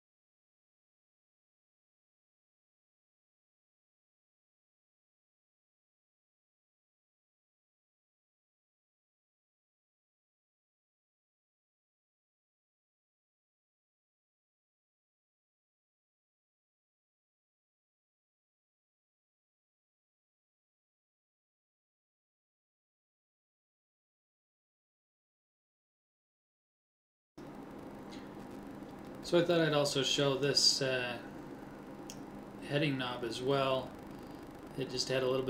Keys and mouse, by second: 1.3 l, 2.6 KP_1, 3.8 middle click, 6.4 shift+d, 13.0-15.5 middle drag, 15.5 middle click, 17.9-19.1 middle drag, 19.1 click, 20.7-21.7 middle drag, 21.8 middle click, 21.9 middle click, 22.9 middle click, 23.3 middle click, 24.5 KP_1, 25.8 a, 25.8 l, 26.5 shift+d, 30.5 middle click, 32.0 a.